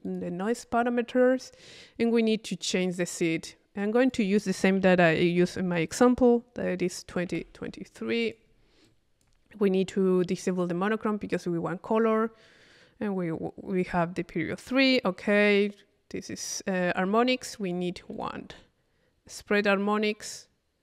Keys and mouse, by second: 3.8 click, 8.8 click, 10.6 click, 17.3 click.